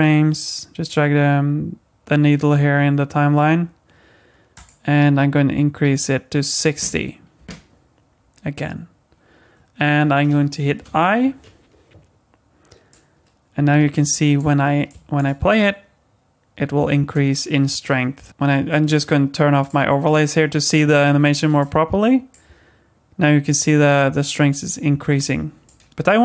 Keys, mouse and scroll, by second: 4.5 click, 12.9 click, 12.9 i, 14.9 click, 15.4 space, 17.0 space, 18.1 z, 18.3 click, 19.6 click, 20.0 click, 21.6 click, 22.5 space, 24.9 space, 25.7 click.